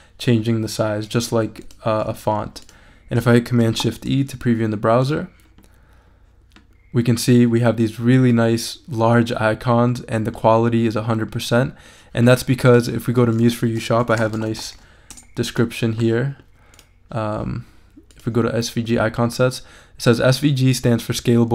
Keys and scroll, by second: 3.6 shift+super+e, 13.8-15.2 typing.